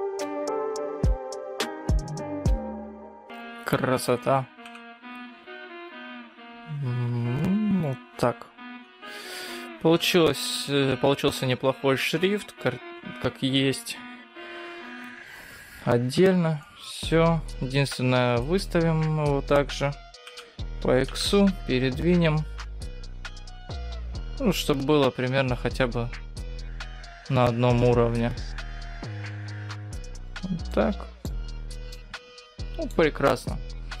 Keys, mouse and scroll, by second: 1.3 g, 4.7 g, 9.0-9.5 scroll down 4, 9.5-10.3 scroll up 4, 10.3 scroll down 1, 10.6-12.3 scroll up 2, 15.9-16.4 scroll down 5, 16.4-16.7 scroll up 5, 16.7 middle click, 18.7 scroll down 1, 20.1 g, 30.9 middle click, 31.6-32.0 scroll up 3, 32.0 middle click, 33.0-34.0 scroll down 4, 33.3-34.0 scroll up 1.